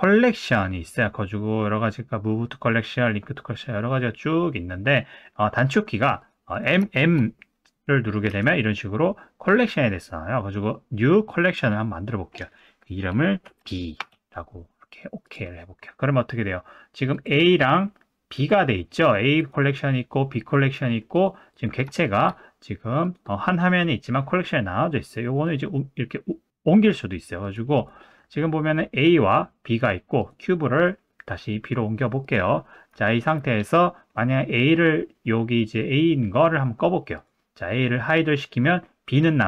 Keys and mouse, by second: 6.3 click, 6.9 shift+middle drag, 8.3 m, 17.1 click, 18.3 click, 19.4 click, 20.4 click, 21.1 click, 22.0 shift+middle drag, 23.0 click, 25.4 click, 27.7 click, 30.2 click, 30.8 click, 32.3 click, 37.1 click, 39.1 click.